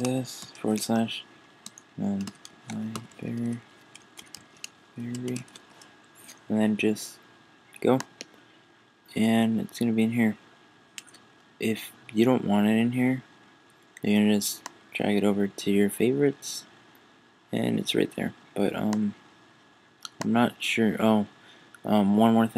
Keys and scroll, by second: 2.2 shift+l.